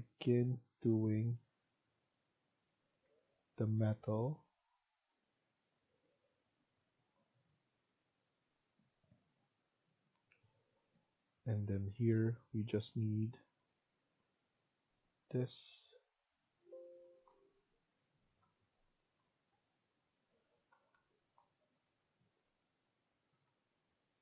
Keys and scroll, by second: 3.0 Escape, 16.9 Escape, 17.2 Escape, 18.2 Tab, 20.3 3.